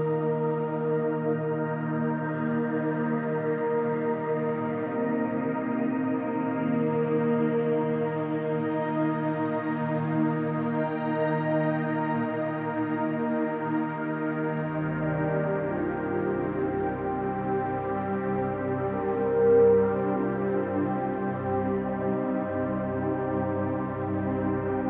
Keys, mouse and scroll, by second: 1.5 click, 2.3 click, 3.4-4.3 scroll down 1, 4.3 click, 10.5-10.9 drag, 11.4 middle click, 12.2 Tab, 12.6-12.9 scroll down 2, 12.9-13.6 middle drag, 14.0-15.0 middle drag, 15.4 scroll down 1, 15.6-16.2 middle drag, 16.5 scroll up 2, 17.0 scroll up 2, 17.3-19.8 middle drag, 20.1-21.0 middle drag, 21.3-21.8 shift+middle drag, 22.1-22.9 middle drag, 23.3 click.